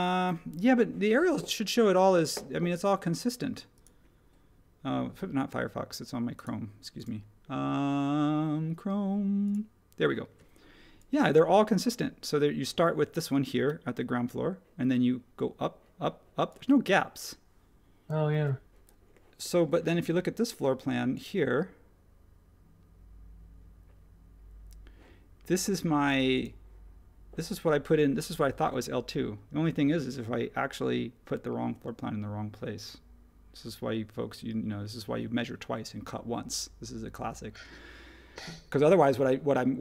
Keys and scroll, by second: 18.3 super+h.